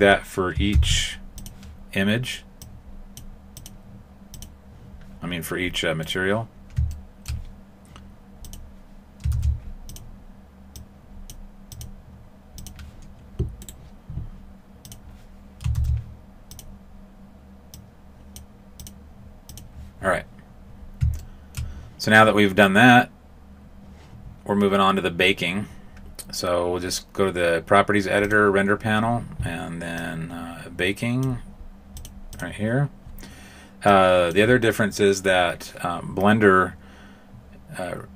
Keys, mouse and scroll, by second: 0.7 shift+d, 2.5 click, 3.5 click, 5.9 right click, 6.9 shift+middle click, 8.4 click, 9.3 shift+d, 10.7 click, 11.7 click, 13.5 right click, 14.8 click, 15.7 shift+d, 17.7 click, 18.7 click, 21.1 shift+middle click, 28.2 click, 29.9 click, 31.9 click, 32.3 click, 33.8 click.